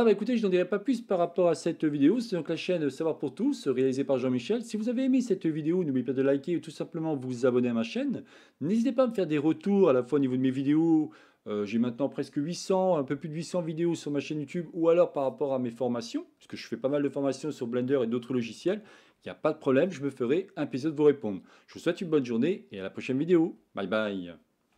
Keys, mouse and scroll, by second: 0.0-1.3 middle drag, 2.2 shift+middle click.